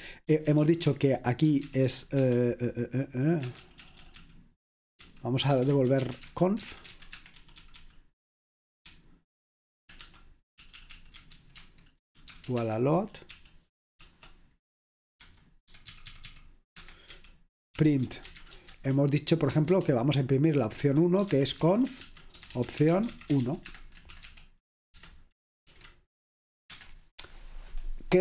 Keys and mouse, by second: 0.0-2.4 typing, 3.6-14.2 typing, 7.1 Escape, 12.7 Escape, 15.2-16.8 typing, 17.9-27.7 typing.